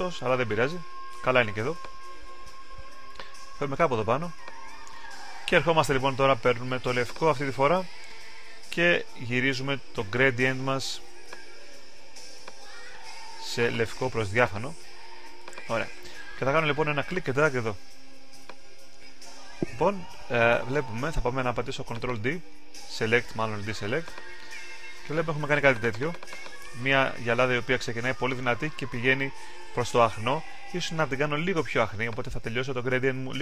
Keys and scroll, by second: 30.1 super+z, 30.8 alt+super+z.